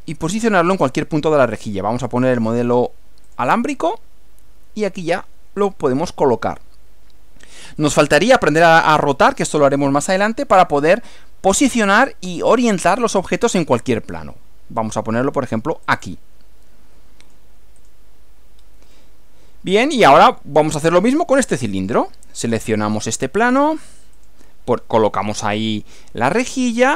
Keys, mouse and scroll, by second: 2.2 click, 3.2 click, 15.8 click, 17.2 click, 17.8 click, 18.6 scroll down 1, 19.0 middle click, 20.0 middle click, 21.5-22.2 middle drag, 22.8 click, 24.2 click, 25.2 scroll down 2, 25.4-26.9 middle drag.